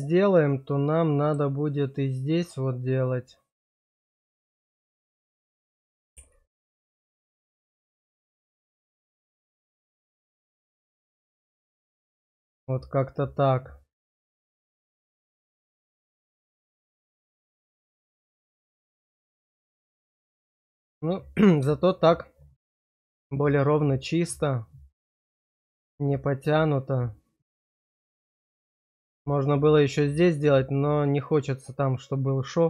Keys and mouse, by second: 4.4 shift+click, 7.7 middle click, 11.1-20.7 middle drag, 22.5-28.8 middle drag, 30.4-32.6 middle drag.